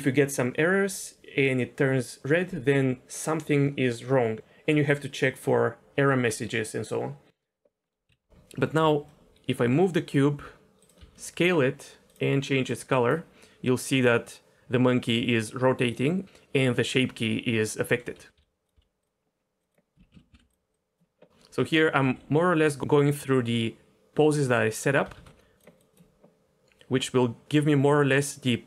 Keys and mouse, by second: 7.8 middle click, 8.1 KP_1, 9.1 shift+middle click, 9.6 g, 11.0 s, 11.4 click, 12.1 click, 18.3 g, 18.7 s, 19.6 click, 20.1 z, 22.0 g, 24.4 click, 25.1 alt+s, 25.6 click.